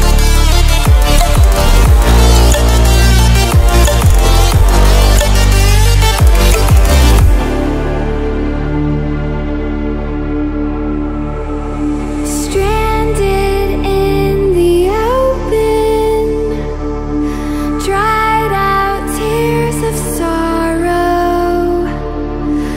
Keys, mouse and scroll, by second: 0.8-1.1 ctrl+alt+scroll down 1, 1.2 ctrl+alt+scroll up 1, 1.9-7.1 drag.